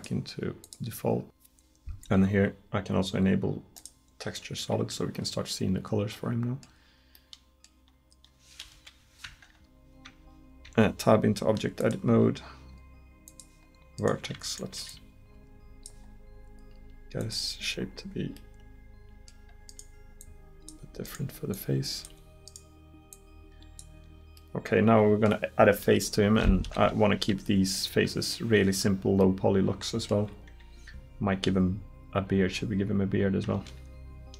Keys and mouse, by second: 4.2-5.7 middle drag, 8.8 KP_1, 9.3 Tab, 10.1 Tab, 10.7 Tab, 12.1 click, 14.0 right click, 17.7-19.1 middle drag, 24.4 middle click, 26.7 KP_1.